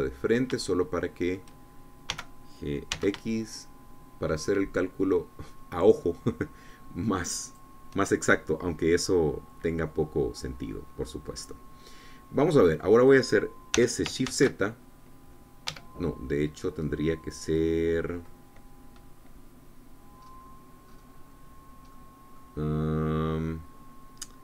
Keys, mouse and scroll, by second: 0.2 KP_1, 1.1-1.6 scroll up 3, 1.6-2.9 shift+drag, 3.0 g, 3.9 x, 8.4 shift+click, 9.6 middle click, 10.0-12.5 drag, 12.5 middle click, 13.4 click, 14.7 s, 15.2 shift+z, 16.6 Escape, 17.5-18.6 scroll down 2, 18.6 click, 21.1-22.1 scroll up 2, 22.9 click, 23.4-24.4 scroll down 6.